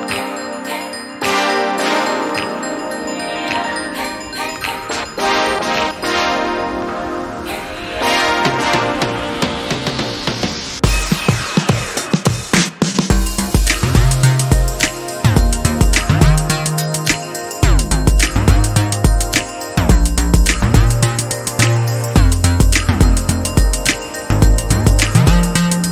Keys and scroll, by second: 0.1 Down, 0.2 Down, 0.3 Down, 0.4 Down, 0.5-1.0 Down, 1.1 Down, 1.3 Down, 1.8 Down, 2.1 Down, 7.1 Down, 10.7 ctrl+j.